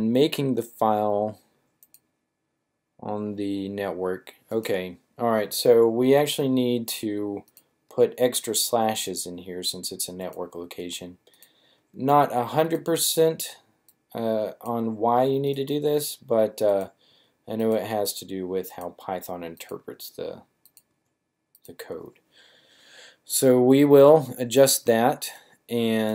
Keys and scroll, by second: 6.2 typing, 7.9 typing, 9.2 typing, 10.5 typing, 11.7 typing, 13.0 typing, 15.4-17.0 typing, 18.0 typing, 19.7 typing, 20.9-21.7 typing.